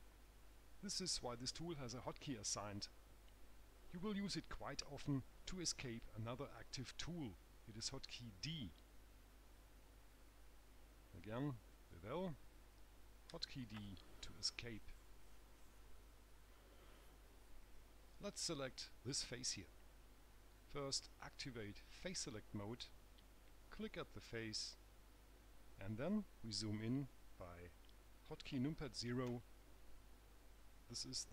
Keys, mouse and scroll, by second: 12.0 click, 13.6 d, 22.5 click, 25.1 click, 29.6 KP_0.